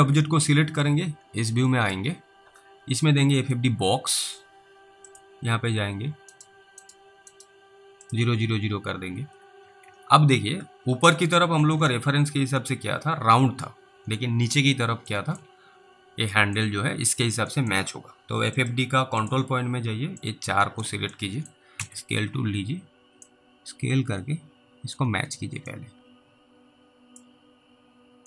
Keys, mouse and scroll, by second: 0.2 alt+w, 0.9 alt+w, 1.2-1.7 scroll down 3, 2.0 middle click, 3.5 click, 6.4 right click, 6.9 double right click, 7.4 right click, 8.1 click, 9.9 alt+w, 11.6 alt+w, 12.5 click, 13.1 scroll down 3, 15.4 alt+middle click, 15.6-16.0 scroll up 3, 16.6 alt+middle click, 17.8 middle click, 18.6 click, 19.7 scroll down 1, 20.5 click, 21.4 middle click, 21.8 r, 23.5 click, 25.2 scroll up 1, 26.0 alt+middle click, 26.0-26.5 alt+scroll up 1.